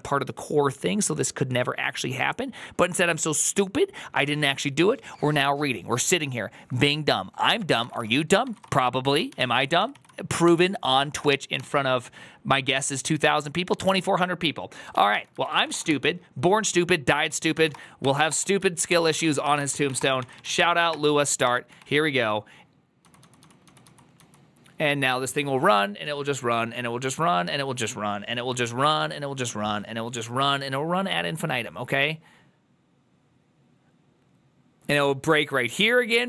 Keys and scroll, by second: 8.2-9.2 typing, 9.7 ctrl+c, 9.8 ctrl+c, 10.3 Up, 11.1 Return, 13.7 alt+{, 14.7-16.0 typing, 17.2-21.6 typing, 18.1 Return, 22.8-25.0 typing.